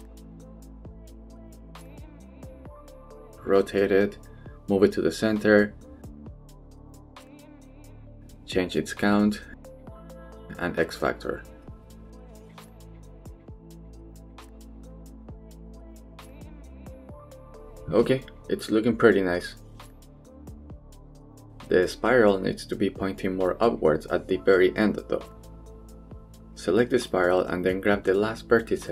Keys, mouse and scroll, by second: 0.1-0.6 right drag, 0.6 Tab, 0.9 middle click, 1.5 shift+middle click, 2.2 shift+middle click, 2.8 KP_3, 3.4 r, 4.1 click, 4.2 g, 5.7 Tab, 6.0-6.4 middle drag, 6.5 shift+middle click, 7.1-8.0 middle drag, 8.7 click, 10.0-10.3 shift+middle drag, 11.2 click, 12.4-13.4 drag, 14.0-15.3 drag, 15.5-15.8 middle drag, 16.2 click, 16.7-22.4 middle drag, 22.5 shift+middle drag, 24.7-25.6 middle drag, 25.7 shift+middle click, 26.1 Tab, 26.5 click, 26.8 middle click, 27.3 shift+middle click, 27.5 g, 28.4 click, 28.8 g.